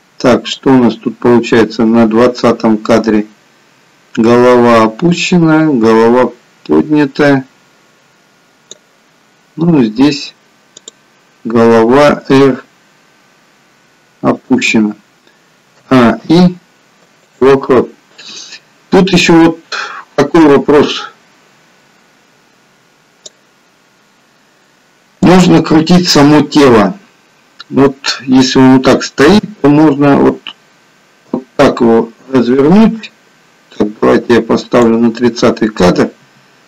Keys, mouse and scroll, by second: 0.7 click, 10.7 click, 12.5 r, 15.7 a, 16.1 i, 19.3 click, 25.2 click, 29.6 r, 34.0 click, 36.2 r.